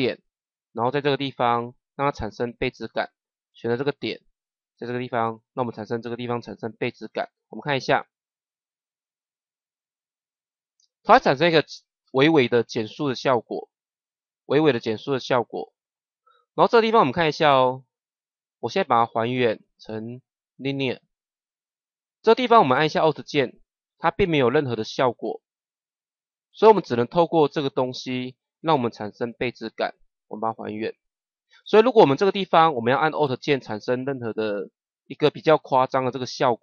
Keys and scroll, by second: 7.7 KP_0.